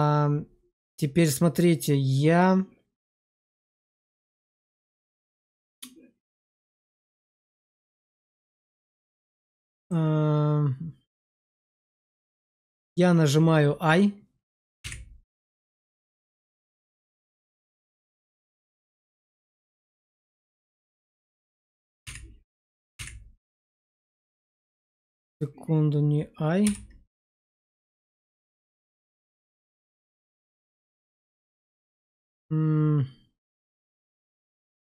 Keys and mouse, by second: 9.8 middle click, 14.7 i, 21.9 i, 22.8 i, 26.5 x, 27.3 x.